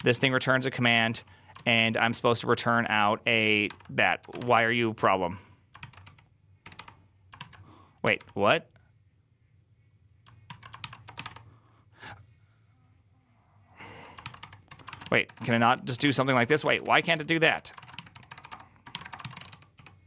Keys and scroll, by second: 0.0-1.1 typing, 1.4 ctrl+u, 3.5 ctrl+d, 4.0-4.7 typing, 5.6 ctrl+c, 5.9-8.0 typing, 7.2 ctrl+o, 10.3 ctrl+o, 10.7 ctrl+c, 10.7-11.5 typing, 14.1-20.0 typing.